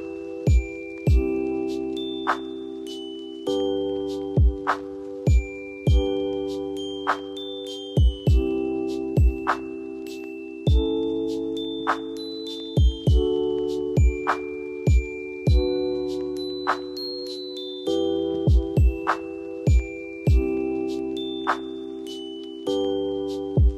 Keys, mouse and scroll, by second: 0.6 shift+click, 1.0-3.5 drag, 3.5 F2, 3.9-5.9 drag, 8.6 F2, 9.2-15.0 drag, 15.0 space, 15.7 F2, 16.0-17.4 drag, 17.4 space, 18.2-23.0 drag, 23.0 space, 23.6 scroll down 1.